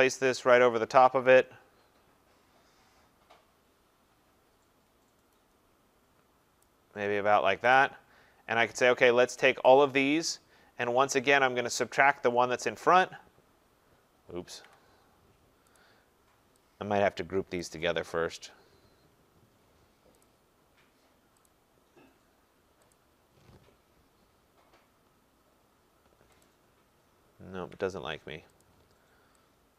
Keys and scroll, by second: 14.4 ctrl+z, 27.6 ctrl+z.